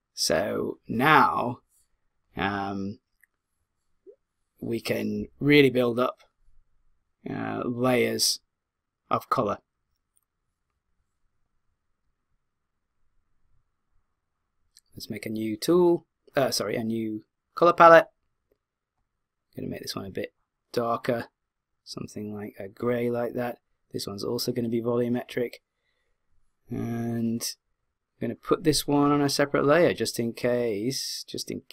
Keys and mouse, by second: 12.3-15.2 drag, 17.8-20.5 drag, 24.4 click, 26.1 click, 28.4-31.0 drag.